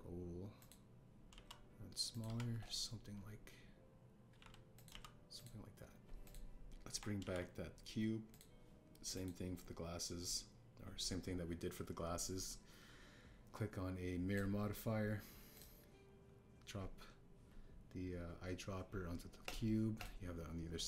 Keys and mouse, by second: 0.3 s, 0.6 x, 1.5 click, 2.3 s, 3.1 click, 3.2 Tab, 5.2 g, 5.3 x, 5.7 click, 5.8 s, 6.3-7.3 drag, 8.2 alt+h, 9.3 click, 10.1-15.3 drag, 16.5 click.